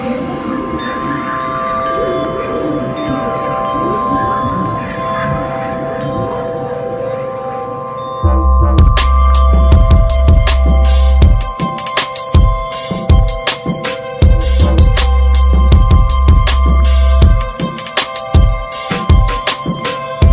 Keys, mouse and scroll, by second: 0.1 alt+middle click, 0.4 alt+middle click, 1.0 click, 1.7 s, 3.1 click, 3.7 shift+middle click, 4.6 ctrl+b, 5.6 s, 6.5 ctrl+b, 11.2 click, 11.6-12.7 middle drag, 12.7 drag, 13.0 Tab, 13.9 shift+middle click, 14.5 alt+z, 14.8 click, 16.5 s, 18.6 alt+z, 18.8 Tab, 19.0 click, 19.4 shift+middle click, 19.7 click, 20.0-20.3 middle drag.